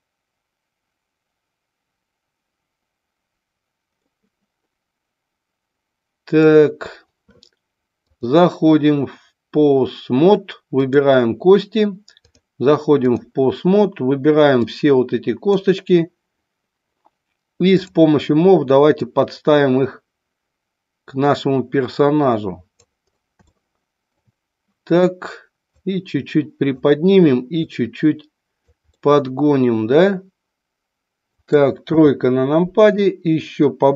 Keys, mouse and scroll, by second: 4.1-6.6 middle drag, 8.1-10.0 drag, 10.8 click, 12.2 click, 14.7-15.6 drag, 19.1-22.8 drag, 23.5 shift+scroll up 1, 23.5-24.2 shift+middle drag, 25.7-26.8 drag, 27.7-28.7 drag, 28.9-31.8 middle drag, 31.9 KP_3, 33.1 click.